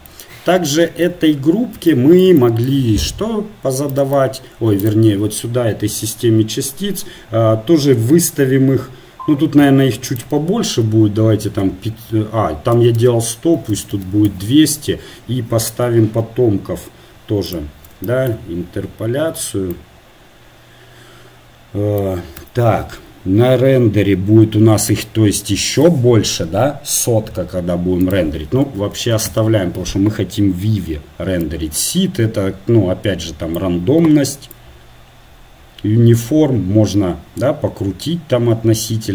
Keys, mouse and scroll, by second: 4.9-14.3 right drag, 14.3 BackSpace, 14.3 KP_0, 17.5-36.4 drag.